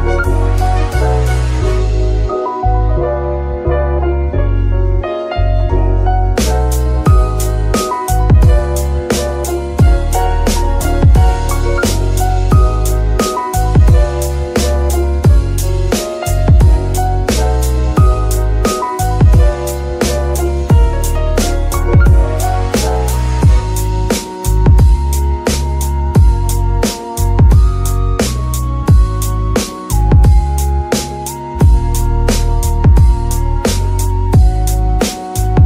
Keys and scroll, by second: 0.1 g, 0.8 Escape, 1.8 g, 4.1 Escape, 4.8 g, 8.0 alt+r, 8.7 alt+g, 9.2 g, 10.2 x, 12.2 Escape, 15.2 Escape, 16.1 r, 18.6 Escape, 19.6 r, 20.5 Escape, 23.1 r, 23.2 r, 25.3 Escape, 27.2 r, 27.3 r, 32.8 Escape, 34.3 r.